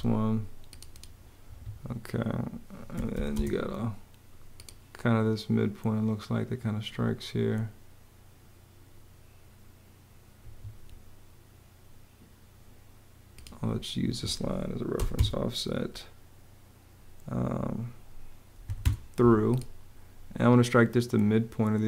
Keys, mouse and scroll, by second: 1.1 Escape, 2.4-3.3 typing, 10.1 Escape, 13.7 Escape, 14.6 o, 14.8 Return, 18.3 t, 18.5 Home.